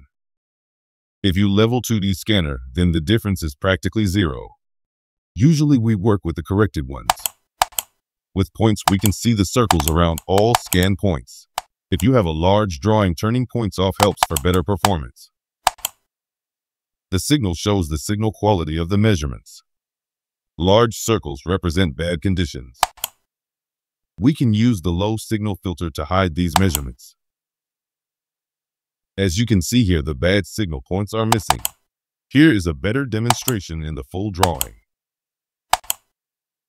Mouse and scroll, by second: 7.0 click, 7.5 click, 8.8 click, 9.6 click, 10.5 click, 13.4-13.9 scroll down 4, 13.9 scroll up 2, 14.1 middle click, 14.8 middle click, 15.6 click, 17.0-18.0 scroll down 4, 18.3-19.4 scroll up 5, 22.8 click, 26.5 click, 29.1-29.8 scroll up 4, 30.8 scroll down 2, 31.3 middle click, 31.4 middle click, 33.2 click, 34.4 click, 35.7 click.